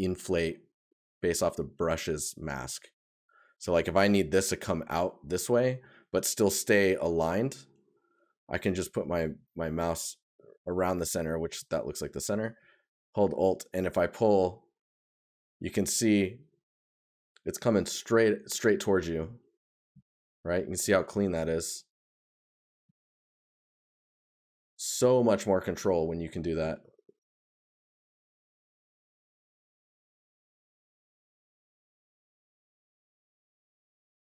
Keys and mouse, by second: 0.9 right click, 3.5 right click, 5.5 right click, 7.0 right click, 15.6 right click, 18.8 right click, 23.8 right click.